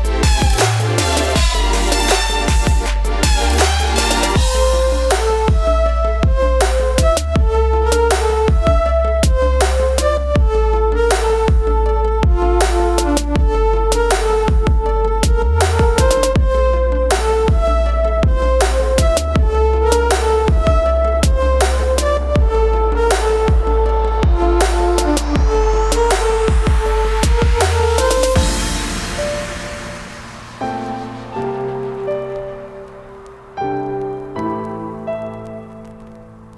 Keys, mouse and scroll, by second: 0.8 right click, 1.6-5.3 drag, 5.9 Left, 9.5 Down, 12.2 click, 14.7 click, 15.4-18.6 shift+drag, 18.6 shift+click, 18.9 shift+right click, 20.9 click, 23.2 ctrl+g, 23.2 typing, 28.6 click, 31.4 click, 34.4 right click, 35.2 click.